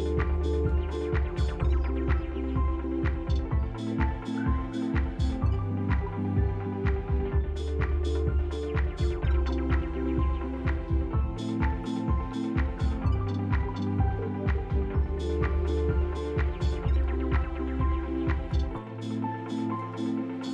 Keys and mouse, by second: 1.0 click, 1.6 x, 3.9 click, 4.4 x, 5.2 click, 5.9 click, 6.1 x, 7.2 click, 7.4 middle click, 8.4 click, 9.8 middle click, 11.0 alt+shift+click, 13.0-17.8 drag, 19.3 Tab, 20.2 middle click.